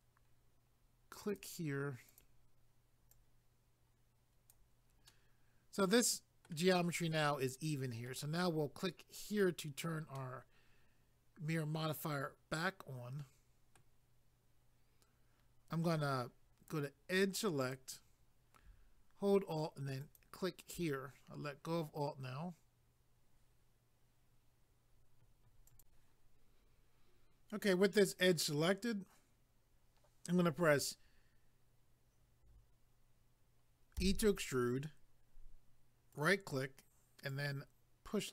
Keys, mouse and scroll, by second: 1.3 click, 2.1 click, 3.1 click, 5.1 middle click, 7.2 middle click, 9.3 click, 10.2 middle click, 17.6 click, 20.0 alt+click, 25.7 click, 36.1 right click, 37.3 click.